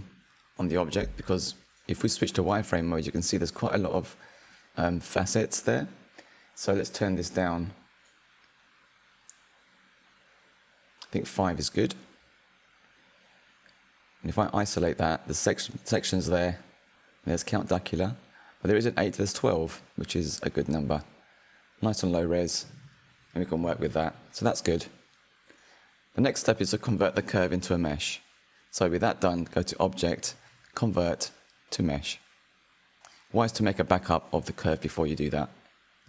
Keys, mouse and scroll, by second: 1.4 q, 3.9-6.9 drag, 7.2-12.4 drag, 13.9 /, 14.7-15.8 middle drag, 15.8-16.2 scroll up 3, 16.2-20.0 shift+middle drag, 21.9-22.5 middle drag, 22.5-22.9 scroll down 2, 22.9-24.6 shift+middle drag, 24.6 /, 25.5-26.3 scroll down 2, 26.3-28.9 middle drag, 28.9 F3, 29.1-32.1 drag, 35.7 click.